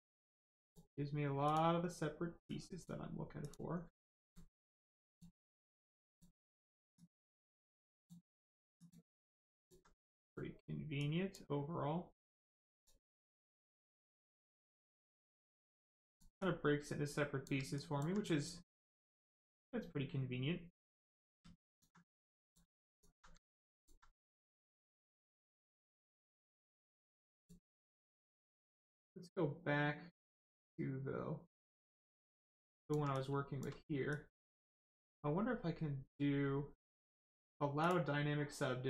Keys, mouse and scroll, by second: 1.4 click, 4.0 alt+click, 4.5 click, 4.5 click, 6.9 click, 9.4 alt+click, 10.1 click, 10.2 click, 12.6 click, 15.4 click, 15.9 alt+click, 16.3 click, 16.4 click, 17.7 alt+click, 18.2 click, 18.3 click, 21.5 alt+click, 22.0 click, 22.1 click, 22.9 alt+click, 23.5 alt+click, 24.1 click, 24.1 click, 26.9 click, 31.7 click, 32.5 alt+click, 33.1 click, 33.1 click, 33.3 shift+click, 37.7 click.